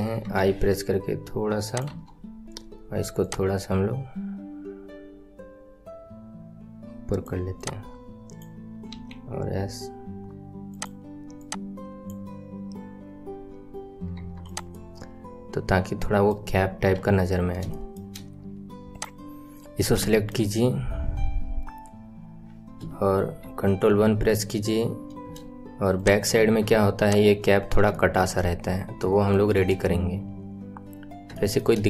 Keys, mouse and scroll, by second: 1.8 KP_1, 2.2 scroll up 3, 3.1 click, 7.5 click, 8.9 s, 11.3 click, 12.0-13.1 drag, 13.1-14.0 scroll down 8, 14.1 Tab, 14.4 click, 14.7-16.9 middle drag, 16.9 KP_1, 17.3 scroll down 3, 17.6-18.9 shift+middle drag, 18.9 click, 19.6 scroll up 4, 20.0-22.2 shift+middle drag, 22.2 scroll down 2, 23.3 ctrl+KP_1, 24.9-25.3 scroll up 3, 25.9 click, 26.3 Tab, 27.0 click, 27.5 scroll down 2, 27.9 shift+middle click, 28.3-29.3 scroll up 1, 29.3-30.9 shift+middle drag, 30.9-31.3 scroll up 1, 31.3-31.8 shift+middle drag.